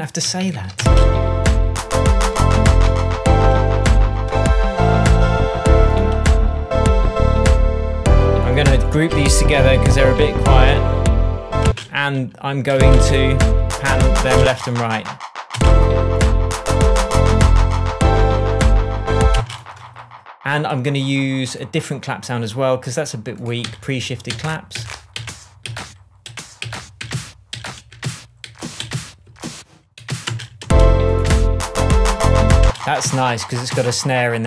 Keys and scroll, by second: 0.7 super+space, 1.7 space, 2.8 shift+Tab, 9.7 super+g, 11.6 space, 14.3 space, 19.3 space, 23.6 Right, 24.3 Down, 26.2 Up, 26.6 Down, 27.5 Up, 27.9 Down, 28.8 Up, 29.2 Down, 29.9 Up, 30.2 space, 32.6 space.